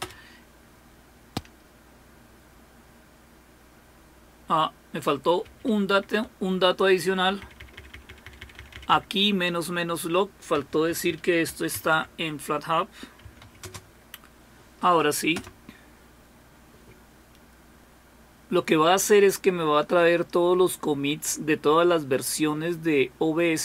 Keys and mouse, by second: 5.4 Home, 6.9-7.4 Left, 7.6 Left, 7.8 Left, 7.9 Left, 8.1 Left, 8.2 Left, 8.4 Left, 8.6 Left, 8.7 Left, 8.9 Left, 10.3-13.9 typing, 15.3 BackSpace.